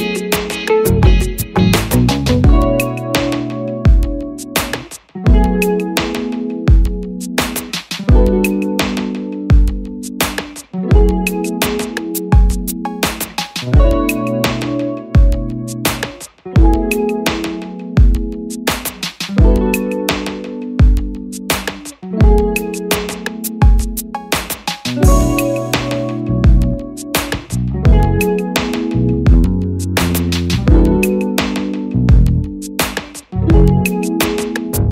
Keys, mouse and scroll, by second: 18.9 double click, 24.1 Return, 28.1 double click, 31.3 Return.